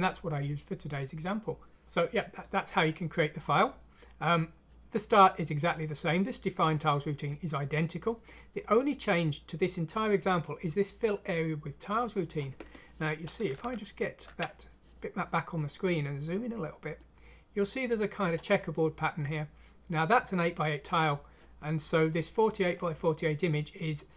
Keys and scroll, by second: 13.6 alt+Tab.